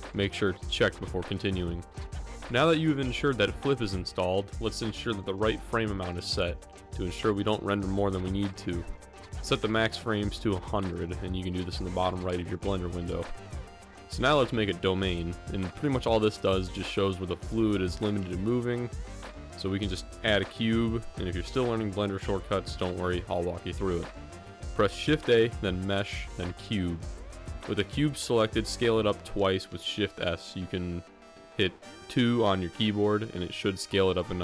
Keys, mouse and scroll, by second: 7.7-11.0 drag, 9.4 0.